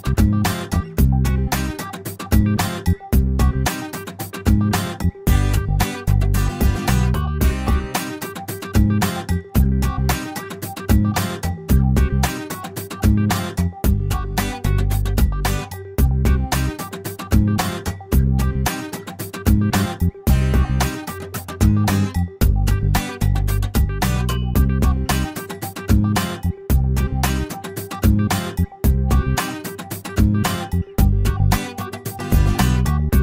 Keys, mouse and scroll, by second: 2.4 scroll up 1, 2.6 middle click, 2.7-4.4 drag, 6.4 click, 9.0 click, 9.9 click, 12.1 click, 13.2 click, 13.8 middle click, 16.4 click, 17.2 click, 19.9 click, 21.3 click, 22.4 middle click, 22.9-24.7 scroll up 1, 24.7 click, 25.4 click, 26.0 middle click, 26.3 scroll up 1, 28.5 click, 29.2 click, 29.8 right click, 30.3-30.6 scroll down 1, 31.4-32.3 scroll up 2.